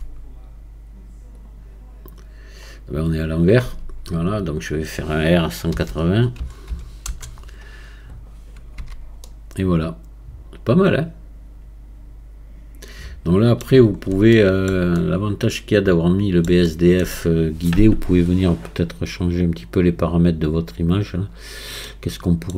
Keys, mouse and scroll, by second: 3.1-3.7 scroll up 1, 3.7 Tab, 9.2-12.3 middle drag, 14.0-14.3 scroll up 2, 14.3-19.2 shift+middle drag, 19.2-21.9 drag, 21.9-22.5 middle drag.